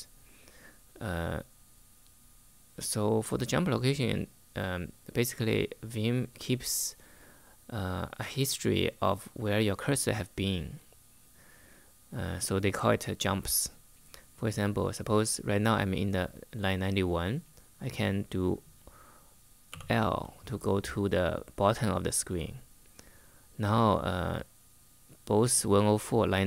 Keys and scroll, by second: 19.4 shift+l.